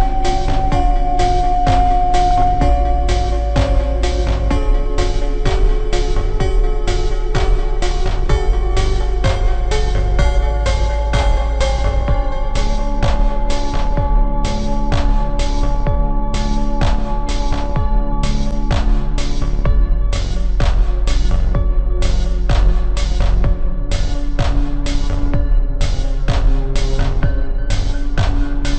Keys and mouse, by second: 0.0 e, 1.1 a, 5.4-7.2 middle drag, 7.2 KP_1, 9.2 KP_3, 13.9 b, 15.3 KP_1, 16.0 middle click, 16.7 click, 16.7 e, 22.4 e, 24.6-25.8 middle drag, 25.8 e, 27.2-28.7 drag.